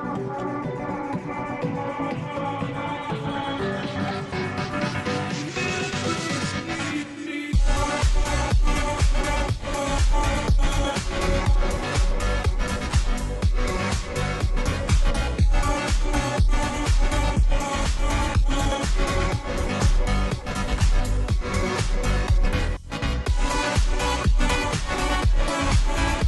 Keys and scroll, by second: 5.9-7.5 space, 10.0 space.